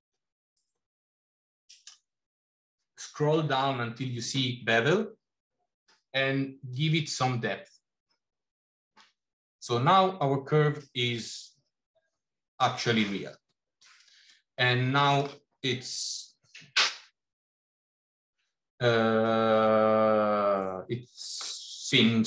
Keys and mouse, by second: 6.6-13.7 drag, 14.1-15.2 middle drag, 19.3-21.3 middle drag.